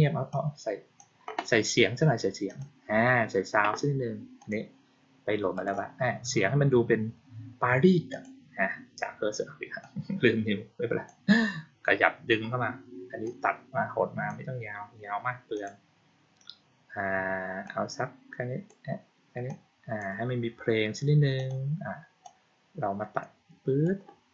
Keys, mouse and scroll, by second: 0.2-0.8 drag, 2.3 click, 4.3 click, 5.4 click, 8.0 click, 9.7-10.9 drag, 13.1-14.1 drag, 15.4 click, 17.5-18.5 drag, 19.3 click, 21.2 click, 22.1-23.7 drag.